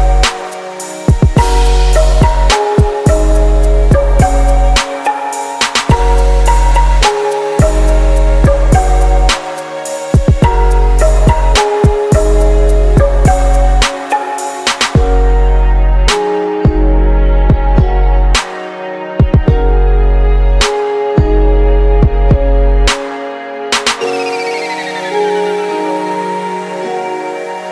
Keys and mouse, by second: 1.5-3.5 right drag, 2.3-4.2 drag, 7.3-9.1 middle drag, 8.3-9.8 right drag, 9.5 shift+d, 11.4 shift+d, 13.1-15.1 drag, 13.3 shift+d, 15.7 right click, 17.0 shift+d, 20.6-22.4 right drag, 22.1-24.1 drag, 23.6 shift+d, 26.1 shift+d.